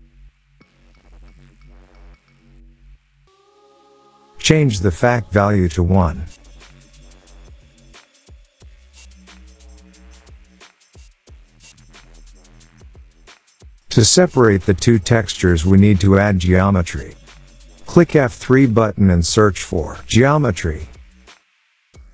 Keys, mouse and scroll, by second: 2.5 click, 13.1 click, 15.4 click, 15.8-17.7 scroll, 17.7 click, 17.7 scroll, 18.9 F3, 19.9 typing, 21.1 click, 21.5 click.